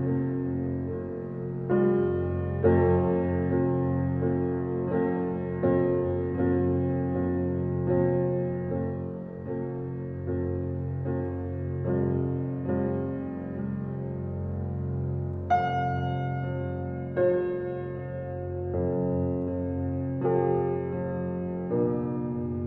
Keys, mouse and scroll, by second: 8.3 click, 10.7-20.7 drag, 21.1-22.6 drag.